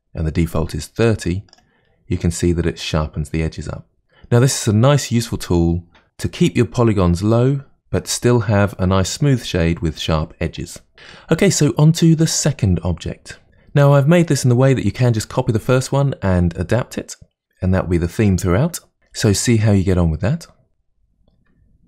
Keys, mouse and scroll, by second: 2.5-2.9 scroll up 2, 3.7-5.0 middle drag.